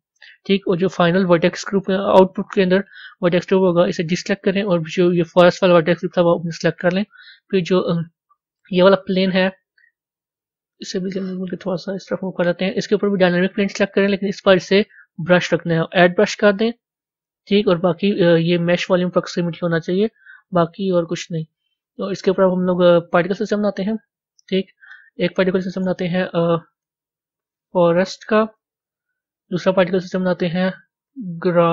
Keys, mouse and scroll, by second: 13.2-21.7 drag, 25.1 click, 25.8-29.5 drag, 30.1-31.7 drag.